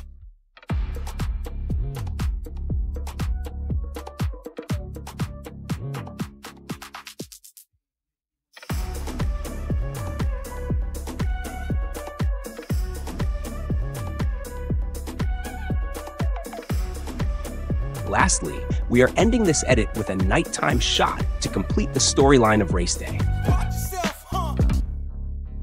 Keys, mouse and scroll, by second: 0.0 click, 0.6-1.2 drag, 1.4 click, 1.6 click, 2.0 click, 2.4 space, 3.2 space, 4.8 drag, 5.2 click, 5.7 space, 6.4 space, 6.7 click, 7.7 click, 7.7 space, 8.4 space, 8.8 click, 9.2 click, 9.6 click, 10.1 click, 10.2 space, 10.5 space, 10.6 space, 11.1 click, 11.6 click, 11.7 ctrl+b, 11.8 Delete, 12.1-14.6 typing, 12.9 click, 13.6 click, 14.3 click, 14.5 ctrl+b, 14.6 Delete, 15.6 click, 15.9 click, 16.2 click, 16.6 click, 16.7-18.3 typing, 17.5 click, 18.7 ctrl+b, 18.8 Delete, 19.5 click, 20.7 click, 21.5 click, 22.2 click, 22.8 click, 23.0 space.